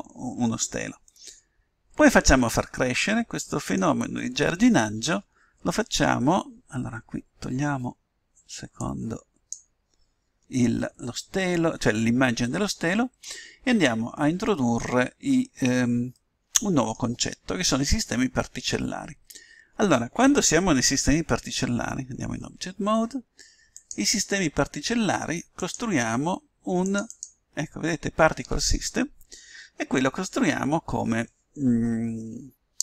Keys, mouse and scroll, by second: 1.0-2.9 middle drag, 8.7 click, 10.3 click, 16.1-18.0 middle drag, 21.7 Tab, 23.7-29.0 drag.